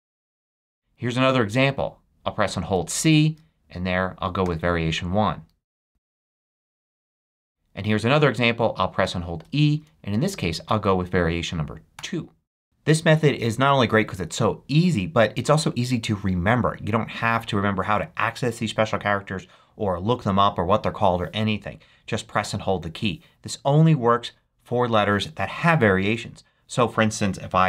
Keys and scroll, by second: 0.0-1.6 typing, 4.4 1, 5.6 a, 5.9 space, 6.3 c, 6.8 f, 8.3 e, 11.9 2.